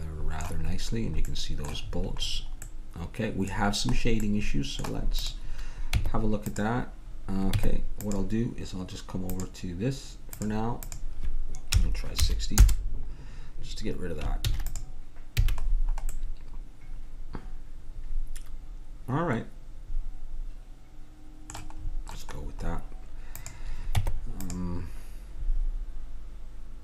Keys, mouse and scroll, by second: 0.7 middle click, 5.2-7.0 drag, 6.0 Tab, 7.5 Tab, 9.3-12.8 drag, 14.4 ctrl+s, 15.4 a, 15.6-17.1 middle drag, 21.9-23.4 middle drag, 23.4-25.3 drag, 24.0 Tab.